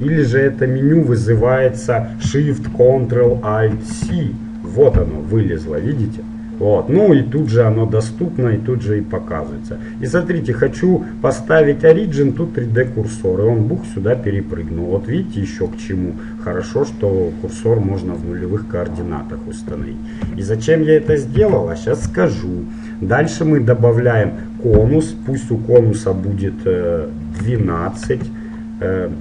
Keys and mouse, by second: 7.6-9.5 drag, 14.1-15.9 middle drag, 16.7-18.9 middle drag, 20.4 KP_1, 21.5 shift+a, 25.5-27.1 drag.